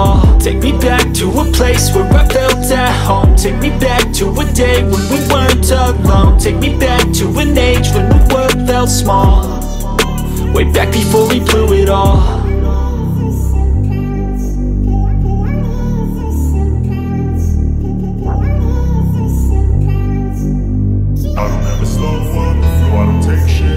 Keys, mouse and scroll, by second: 0.5 click, 3.1 click, 6.8-7.3 scroll up 1, 11.1 space, 11.3 click, 11.6 space, 14.0-23.7 drag.